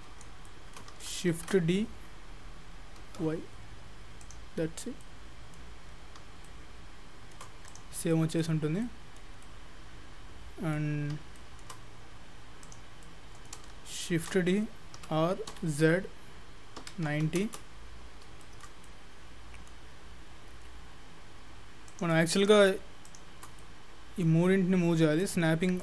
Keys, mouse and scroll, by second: 0.0-0.5 scroll up 6, 0.5 shift+middle click, 1.3 shift+d, 5.0 middle click, 5.8-6.2 scroll up 4, 6.5 shift+middle click, 7.7 click, 8.0-8.3 scroll down 7, 8.1 middle click, 8.7-9.1 scroll down 2, 8.8 middle click, 9.4 middle click, 11.0 scroll up 4, 11.4 shift+middle click, 12.7 click, 13.1 middle click, 14.2 shift+d, 18.1-18.5 scroll up 4, 18.5 shift+middle click, 18.9 middle click, 20.3-21.3 scroll down 3, 22.4 shift+click, 23.6 middle click, 25.3 click.